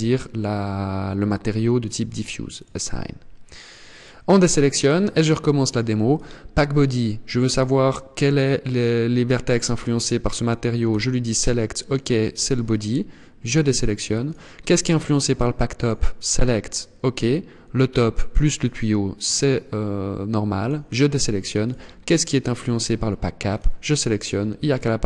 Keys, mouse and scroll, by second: 2.0 click, 3.4 click, 4.2-4.9 scroll down 1, 5.5 click, 10.3 click, 12.8 click, 13.7 click, 15.2 click, 20.0 click, 21.0 click, 23.0 click.